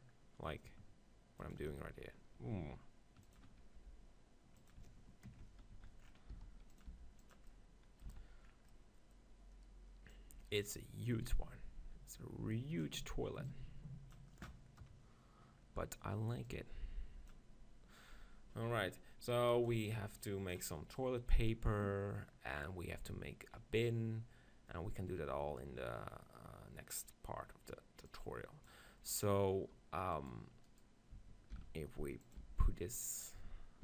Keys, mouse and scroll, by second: 1.7-3.3 drag, 3.4-5.5 drag, 3.8 g, 5.8 z, 6.5 s, 6.9 g, 8.1 z, 10.5-12.9 drag, 13.5-15.3 drag, 14.8 KP_0, 15.7-20.6 middle drag, 18.1 click, 19.3-21.7 drag, 28.1-29.9 drag, 30.2-32.5 right drag, 31.7 shift+f, 32.5 g.